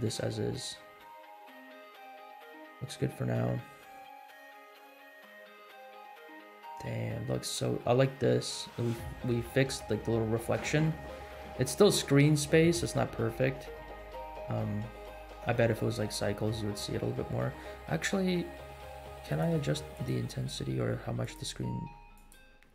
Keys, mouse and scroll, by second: 0.2 space, 1.6 scroll up 2, 2.6 scroll down 2, 4.9-5.7 scroll down 4, 8.6-8.9 shift+middle drag, 9.2 scroll up 1, 16.8 scroll down 2, 17.5 space, 19.2 click, 19.9 click, 21.2 click, 22.1 click.